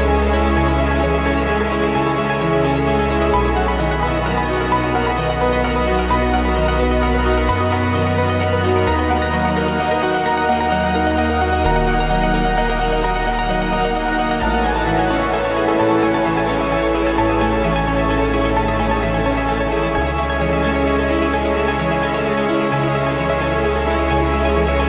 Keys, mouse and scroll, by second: 1.2 click, 2.2 click, 3.4 click, 4.6-8.2 drag, 8.7-10.7 drag, 11.2 click, 11.6 click, 12.9 click, 15.2 click, 17.2 click, 18.7 click, 19.1 click, 20.0-21.9 drag, 22.8 click, 24.2 click.